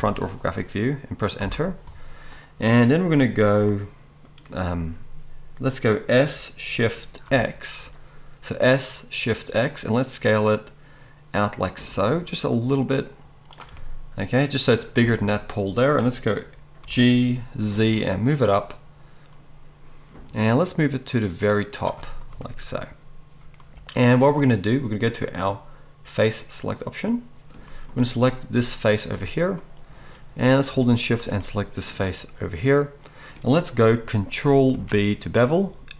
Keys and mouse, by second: 6.2 s, 16.8 g, 25.3-31.1 drag, 31.1-35.9 shift+middle drag, 34.7 ctrl+b.